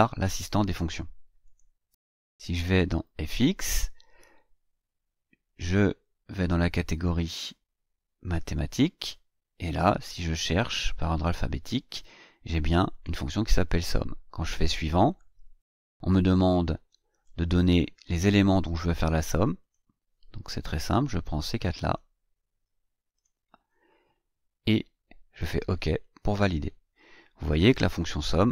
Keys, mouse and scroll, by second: 1.4 click, 6.4 click, 8.5 click, 9.7-12.2 drag, 12.9 click, 15.1 click, 16.9-18.0 drag, 19.6 click, 20.9-22.1 drag, 23.1 click, 25.9 click, 27.8 click.